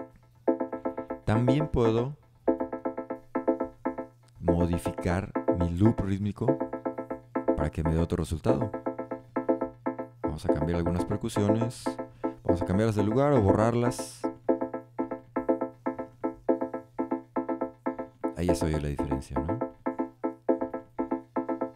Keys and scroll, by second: 3.6 super+d.